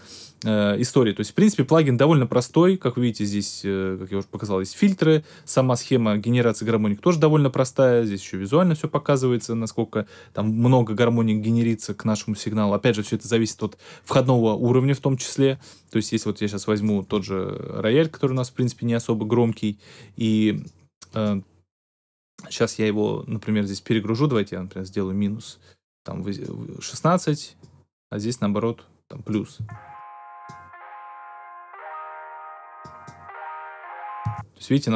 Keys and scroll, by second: 29.5 space, 34.2 space.